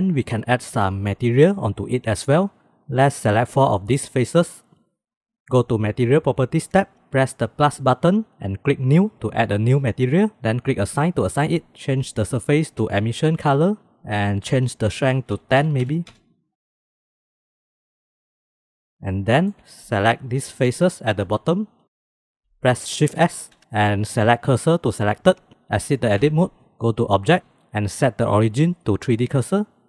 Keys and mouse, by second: 3.9 shift+click, 5.0 shift+click, 6.7 click, 7.7 click, 8.8 click, 11.2 click, 12.3-13.5 drag, 14.7-16.5 drag, 17.5 middle click, 18.1 shift+middle click, 19.6 click, 20.7 click, 21.2 middle click, 23.1 shift+s, 26.2 Tab, 27.2-28.3 right drag, 29.4 click, 29.8 drag.